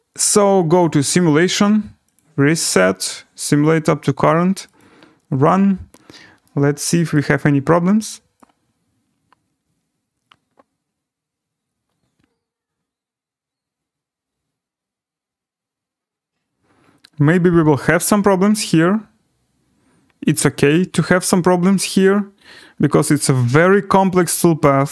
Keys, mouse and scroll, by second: 0.8 click, 2.1 click, 3.6 click, 5.8 click, 7.1 right click.